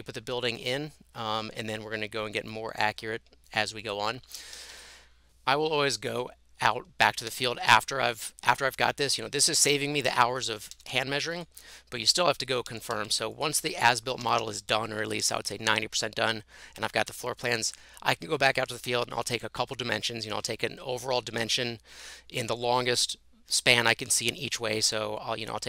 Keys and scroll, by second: 4.3 Escape, 4.6 Escape, 4.7 Escape, 7.1-8.3 typing, 9.8-10.6 typing, 10.6 Tab, 10.8 Tab, 12.7 Tab, 13.0 Tab, 14.2 Escape, 14.4 Escape.